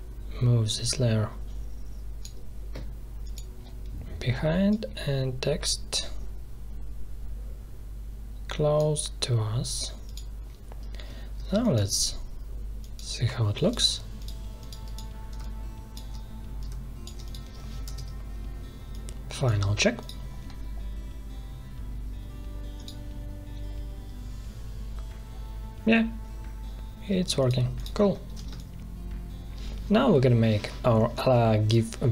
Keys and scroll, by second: 11.4 space, 17.8 ctrl+Return, 28.4 space.